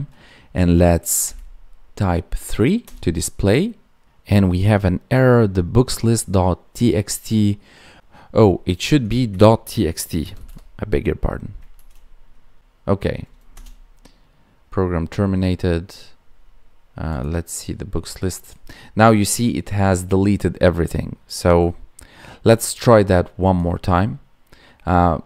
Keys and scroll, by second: 11.7 ctrl+s.